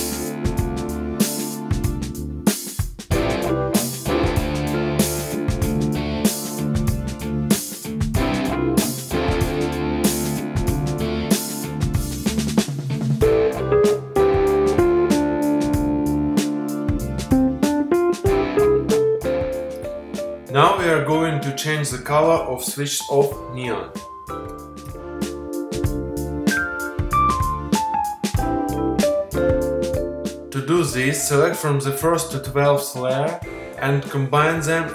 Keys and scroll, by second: 0.6 space.